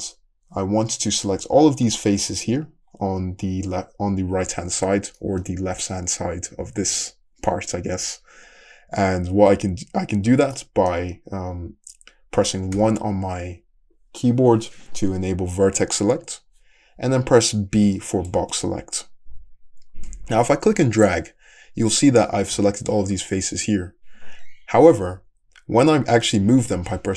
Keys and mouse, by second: 9.6 `, 11.0-17.8 middle drag, 12.8 1, 17.8 b, 25.0 g.